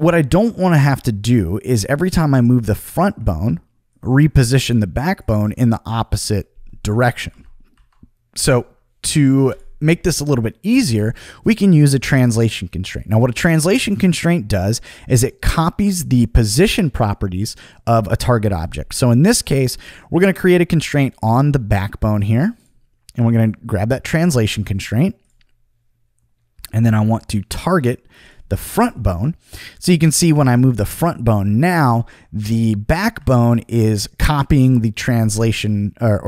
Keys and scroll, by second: 7.3 super+z, 8.3 super+z, 33.2 super+z.